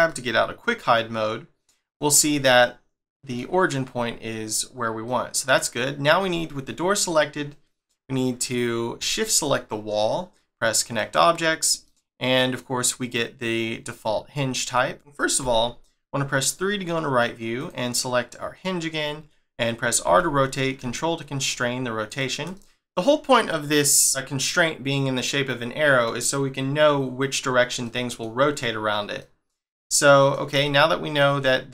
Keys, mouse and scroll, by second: 0.1 middle click, 2.3 shift+middle click, 5.0 middle click, 5.6-7.3 scroll down 1, 9.1 shift+click, 9.8 scroll down 1, 10.8 click, 11.8 middle click, 12.7-14.3 scroll up 2, 14.7 middle click, 15.4 3, 17.6 click, 20.0 r, 22.5 middle click, 24.3 middle click, 27.8 middle click, 29.2 middle click, 30.6 shift+middle click.